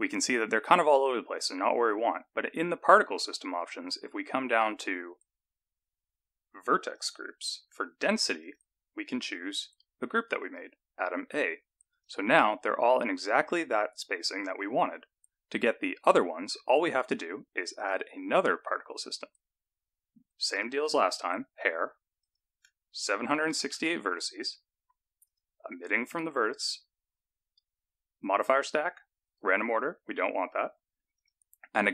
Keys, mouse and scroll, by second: 2.0-5.8 scroll down 9, 7.0 click, 7.6-8.0 scroll down 3, 8.4 click, 12.0 click, 15.6-17.8 scroll up 16, 17.8 click, 21.0 click, 22.2 click, 25.3 click, 28.8 click, 29.8 click, 31.2 click.